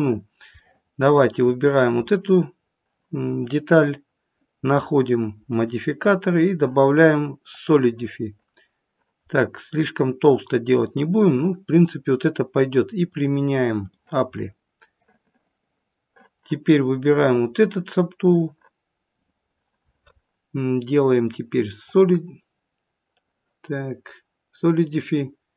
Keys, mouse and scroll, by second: 0.5 middle click, 1.4 click, 5.4 click, 6.2 click, 9.2 middle click, 13.0 click, 14.3 middle click, 17.0 click, 19.1 click.